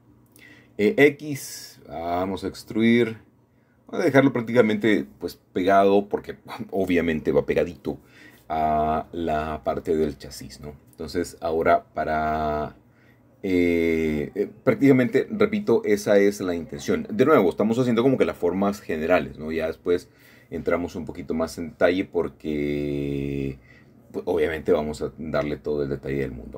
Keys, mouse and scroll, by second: 0.2-0.6 typing, 2.9-3.6 typing, 3.2 shift+click, 3.8 shift+middle click, 4.1 shift+middle click, 4.2 shift+middle click, 5.0-5.8 typing, 5.2 click, 5.3 middle click, 6.2-6.9 scroll down 1, 6.9 shift+middle click, 7.5 scroll up 1, 7.6 scroll down 1, 7.7 middle click, 9.0-9.8 scroll up 2, 9.1 middle click, 9.8-11.2 shift+middle drag, 11.3 middle click, 12.7 shift+middle click, 13.8 shift+middle click, 15.5 middle click, 18.6-19.7 scroll up 2, 19.7 c, 20.3-23.3 drag, 23.4 Escape, 24.8 i.